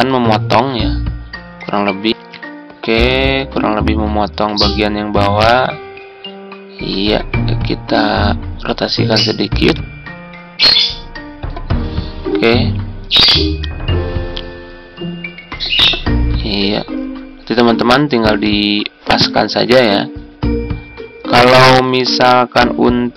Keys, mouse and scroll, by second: 2.0 Tab, 5.2 Down, 11.6 Down.